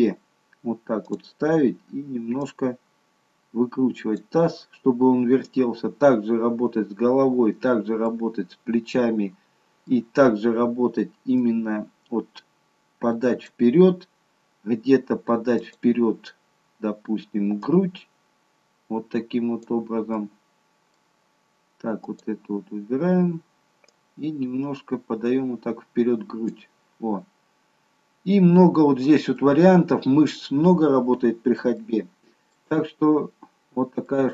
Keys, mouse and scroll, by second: 1.1 click, 2.5 click, 8.1 middle click, 11.5 click, 14.0-14.4 scroll up 2, 15.7 click, 17.7 click, 20.2 middle click, 22.0 click, 24.1 click, 27.4-28.2 scroll down 3, 28.2-29.4 scroll down 3, 29.4 middle click, 30.7-31.8 scroll up 3, 31.8 shift+middle click, 32.8-33.9 scroll down 2, 34.1 middle click.